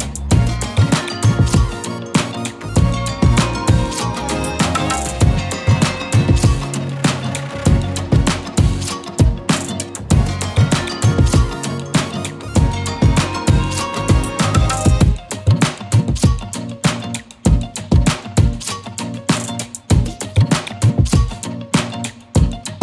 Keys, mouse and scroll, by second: 1.0 right click, 1.8 click, 2.1 z, 2.4 click, 2.5 space, 2.6 click, 5.1 shift+click, 6.5 click, 8.9-11.6 typing, 9.2 click, 9.6 click, 10.0 click, 10.3 click, 10.7 click, 10.9 click, 11.5 click, 13.3 scroll up 1, 15.1 click, 15.7 right click, 17.0 click, 17.8 right click, 20.7 right click, 21.8-22.8 drag.